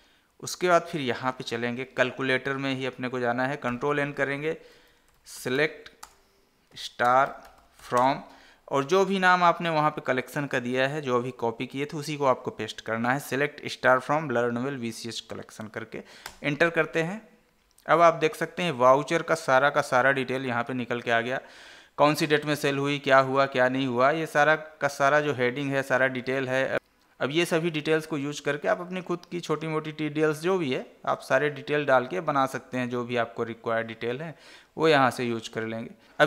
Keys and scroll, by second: 4.0 ctrl+n, 6.3 space, 7.4 space, 8.3 space, 9.1 ctrl+v, 22.0 Right.